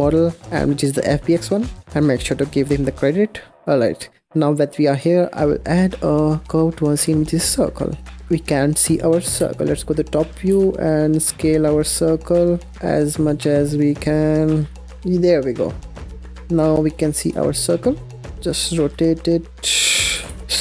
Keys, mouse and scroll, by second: 3.7 click, 4.1 scroll up 1, 7.4 shift+a, 8.2-9.2 scroll down 1, 9.2 KP_7, 9.9-10.4 scroll down 5, 10.4 s, 14.9 s, 16.0 scroll up 2, 16.0-17.2 middle drag, 17.2 KP_0, 18.3 r, 19.6 r.